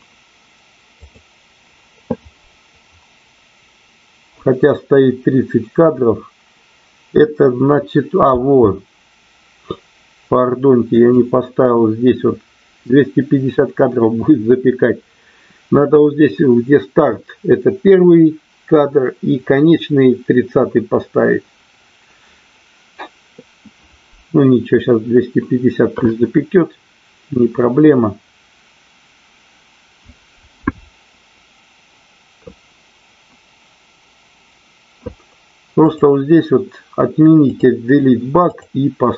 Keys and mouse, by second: 35.7 click, 37.5 click, 38.5-39.1 drag.